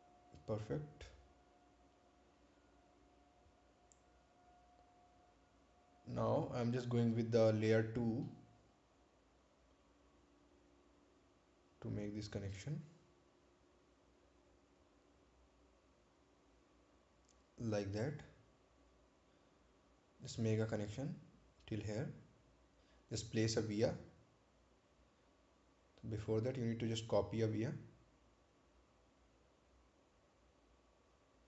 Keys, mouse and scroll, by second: 1.8 click, 6.9 click, 9.8 click, 9.8 click, 17.6 click, 23.2 click, 24.4 right click, 27.6 click.